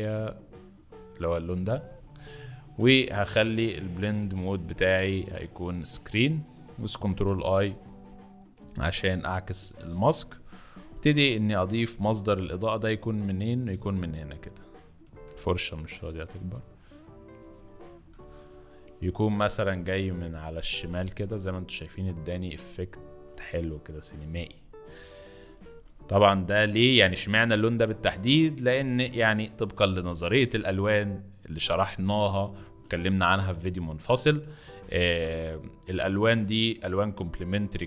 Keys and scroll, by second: 6.9 ctrl+i, 9.5 ctrl+i, 10.9 b, 15.0 ], 18.1 ], 18.3 ], 18.5 ], 22.5 z, 25.6 x, 27.5 space, 30.2 x, 32.1 space.